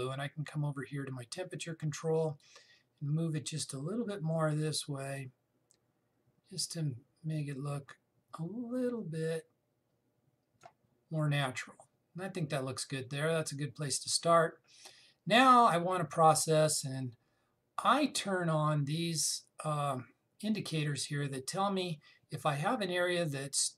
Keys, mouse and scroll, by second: 3.1 click.